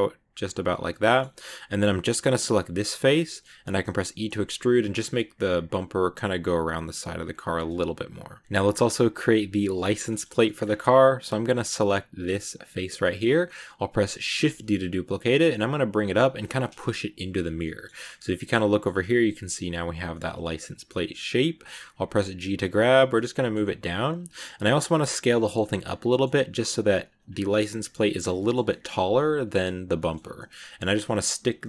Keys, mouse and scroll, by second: 0.7 scroll down 2, 0.8 middle click, 1.2-2.2 scroll up 3, 2.2 right click, 3.1 middle click, 3.8 e, 7.4 Tab, 7.4 scroll down 3, 7.7-10.5 middle drag, 10.5 scroll up 1, 12.1 right click, 12.9-14.3 middle drag, 14.3 shift+d, 16.5 middle click, 16.8 g, 17.4 scroll down 2, 17.5-18.8 middle drag, 18.8 scroll up 2, 20.0-21.8 middle drag, 21.8 g, 23.0 scroll up 1, 23.0 middle click, 23.5 g, 24.2-24.7 scroll down 1, 24.7 s, 25.7 middle click, 26.3 g, 27.2 middle click, 27.6 g, 28.1 middle click, 28.9 g, 29.4 middle click, 29.8 shift+scroll up 3, 30.3 middle click, 30.7 g, 31.1 middle click.